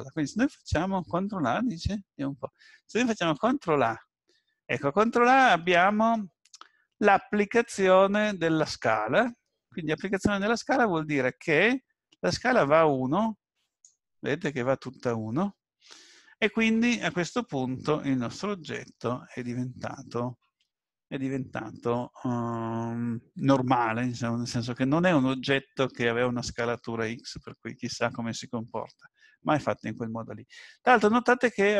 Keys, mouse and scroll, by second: 3.4 ctrl+a.